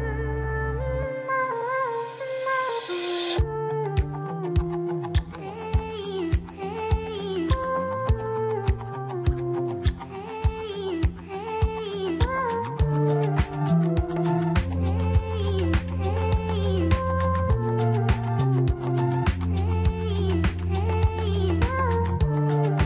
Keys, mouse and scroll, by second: 1.4 ctrl+r, 4.6 Tab, 5.0-5.4 scroll down 1, 5.4-8.5 middle drag, 9.5 KP_1, 10.6-11.3 scroll down 4, 11.4-12.0 shift+middle drag, 12.0 click, 13.2 scroll up 3, 13.9-14.6 shift+middle drag, 14.6 click, 16.4 shift+s, 20.3 click, 22.0-22.8 right drag.